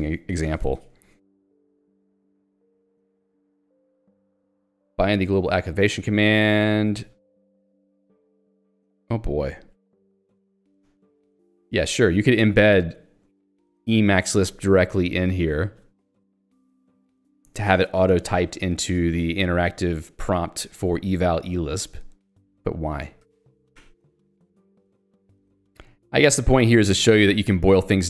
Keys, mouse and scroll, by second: 0.5 j, 8.2 k, 9.9 l, 11.0 j, 12.0 h, 12.7 j, 13.0 h, 21.8 j, 25.8 k, 27.5-28.0 typing.